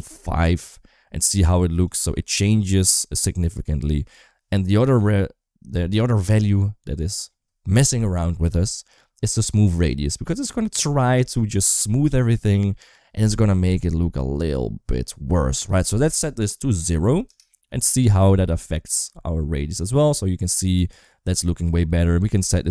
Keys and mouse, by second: 1.9 space, 3.9 space, 15.6-17.2 drag, 18.8 space, 21.5 space, 22.2-22.7 drag.